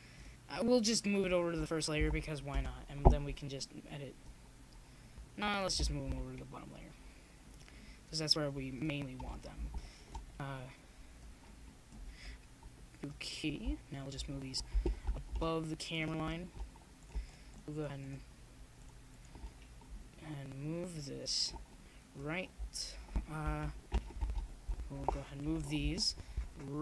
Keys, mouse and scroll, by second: 7.4 shift+z, 8.2 Tab, 8.9 middle click, 11.0-12.1 drag, 12.4-14.2 drag, 24.8-26.8 drag.